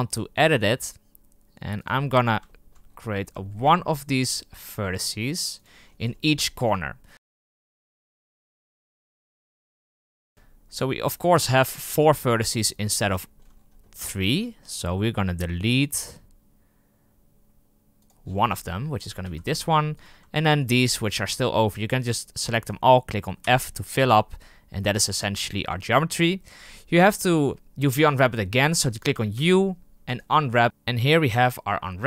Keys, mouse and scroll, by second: 0.3 g, 2.0 scroll up 4, 2.4 shift+middle click, 2.9-3.4 scroll up 6, 3.4 shift+middle click, 3.7-4.2 scroll up 2, 4.2 g, 5.7-6.4 scroll down 22, 6.4 shift+middle click, 6.6-7.1 scroll up 2, 7.1 right click, 7.1 g, 7.5 scroll up 6, 7.7 shift+middle click, 8.5 scroll down 3, 8.6 scroll up 1, 8.8 g, 9.2 middle click, 9.2 scroll up 4, 9.5 g, 10.2-11.1 scroll down 17, 11.1 right click, 11.5 g, 12.7 scroll up 6, 13.1 shift+middle click, 13.5-13.9 scroll up 7, 14.2 g, 16.0 g, 18.1-18.6 scroll down 17, 19.0 right click, 19.1 x, 19.9 right click, 20.5 shift+right click, 21.0-23.4 shift+right drag, 23.4 f, 23.9-24.4 scroll up 8, 24.8 scroll down 4, 28.5 scroll up 3, 30.1 u.